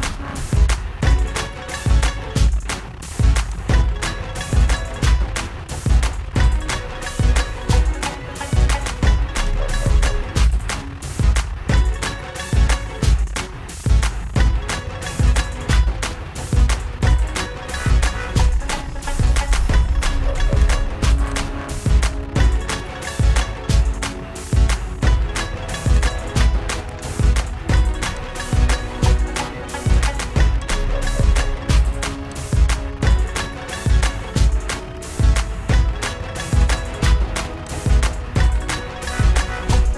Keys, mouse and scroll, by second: 3.8 click, 6.2 click, 9.9 click, 10.1 click, 19.7 click, 21.8 shift+click, 26.2 click, 28.7 shift+click, 31.0 click, 35.1 click, 38.0 click.